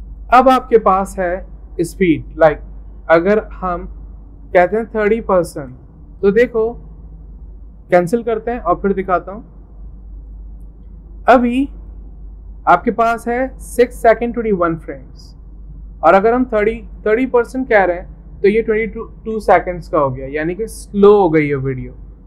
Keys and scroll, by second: 4.8 typing, 9.0 typing, 17.3 typing.